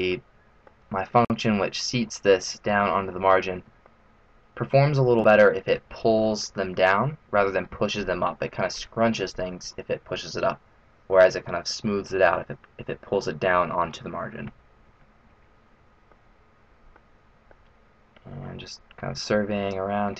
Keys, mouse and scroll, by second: 3.7 middle click, 16.1 middle click, 18.0 middle click.